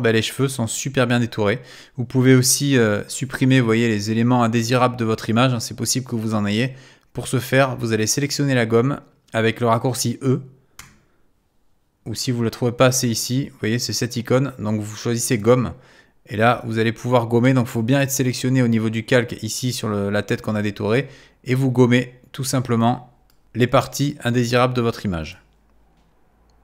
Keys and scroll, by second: 10.8 e.